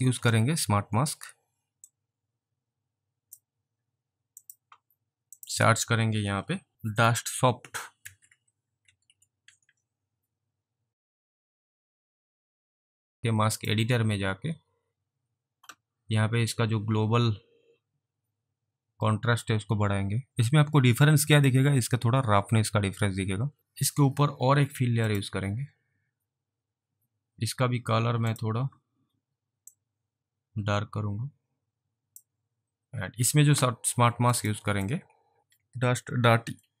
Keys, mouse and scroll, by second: 0.9-1.2 scroll down 2, 2.0 click, 4.5 click, 8.0-9.7 typing, 11.3 click, 19.5 click, 20.3 alt+click, 21.4 click, 25.1 click, 28.3 click, 29.8 click, 34.4 click, 34.9 click.